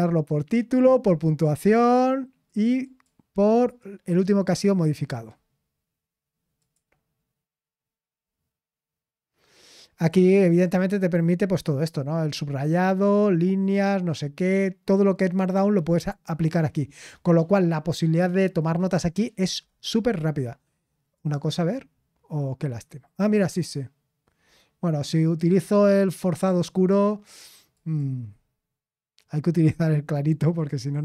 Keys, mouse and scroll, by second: 4.5 click, 10.0-12.4 drag, 21.1-22.4 drag, 28.0-31.0 drag.